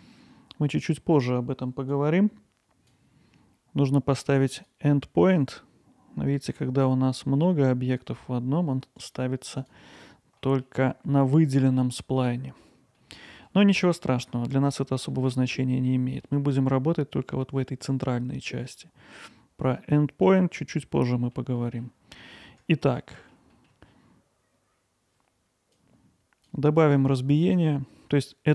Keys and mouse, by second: 2.0 click, 5.2 click, 9.0 click, 9.6 click, 10.4 middle click, 12.3 middle click, 13.0-13.4 alt+middle drag, 13.6-13.9 middle drag, 14.5 middle click, 14.9 alt+middle click, 16.2 middle click, 18.6 middle click, 21.0-21.3 middle drag, 21.6 middle drag, 23.0 middle drag, 23.5 middle click, 25.8 click, 26.9-28.5 right drag.